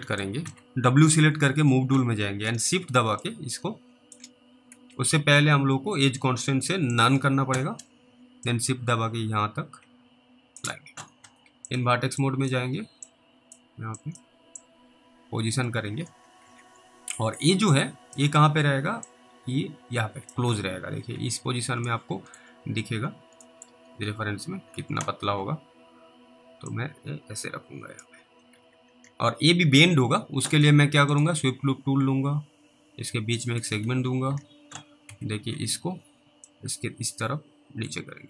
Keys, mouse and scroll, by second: 0.3 middle click, 3.5 shift+click, 4.8 ctrl+z, 7.0 click, 8.7 click, 12.5 click, 13.3 click, 14.2 click, 14.8 click, 15.9 alt+w, 16.5 alt+w, 16.7-17.1 scroll down 2, 17.4 middle click, 18.3 click, 19.3 click, 20.5 alt+w, 21.1 alt+w, 21.4 scroll down 3, 22.1 middle click, 22.5-23.0 scroll down 1, 23.0 scroll up 2, 23.7 scroll down 1, 23.7 middle click, 23.8-24.3 scroll up 1, 24.8 alt+w, 25.2 alt+w, 25.5-27.0 scroll up 2, 27.0 click, 28.6 alt+w, 29.1 alt+w, 31.2 click, 33.9 alt+w, 34.3 alt+w, 35.1 w, 35.5 scroll down 1, 35.6-36.3 scroll up 1, 36.7 click.